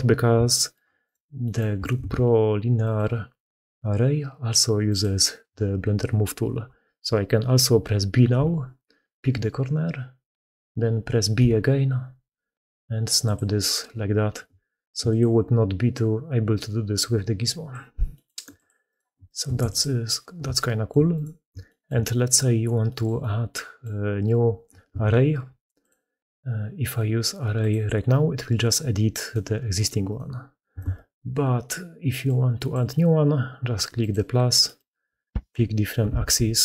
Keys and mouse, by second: 0.2 shift+middle click, 1.8 ctrl+x, 16.9-17.6 middle drag, 18.0 middle click, 18.3 x, 18.7 click, 19.1 shift+click, 20.4-20.7 shift+drag, 21.0 click, 21.5-21.9 shift+drag, 22.7 click, 23.0-23.7 drag, 24.7 ctrl+x, 30.7 ctrl+x.